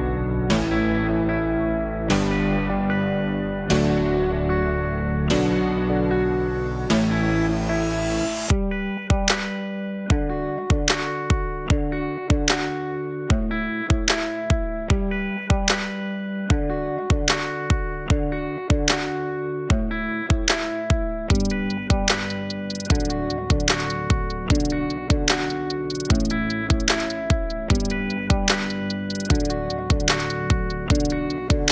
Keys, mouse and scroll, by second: 0.0-2.5 drag, 5.2-6.7 drag, 6.7-7.9 scroll up 4, 7.9 Tab, 8.8-10.8 scroll down 3, 10.8 a, 16.1 ctrl+z, 16.9 r.